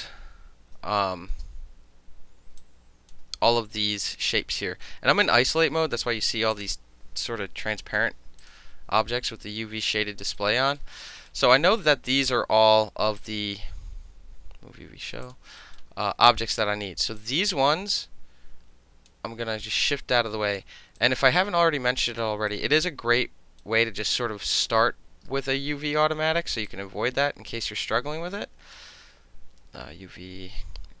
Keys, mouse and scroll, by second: 1.3 space, 2.6-3.1 alt+drag, 4.5 right click, 6.5 click, 7.1 shift+Caps_Lock, 7.8 shift+i, 8.4 click, 9.9 alt+middle click, 10.4 alt+right click, 10.6 alt+middle click, 11.1 alt+right click, 11.3-11.7 alt+middle drag, 11.9 alt+middle click, 13.2 click, 15.2 click, 15.6 alt+right click, 17.2-19.1 drag, 19.7 alt+right click, 21.0-22.2 drag, 22.5 alt+right click, 23.6-24.1 right drag, 24.6 click, 25.3 space, 26.7-28.5 drag, 30.9 click.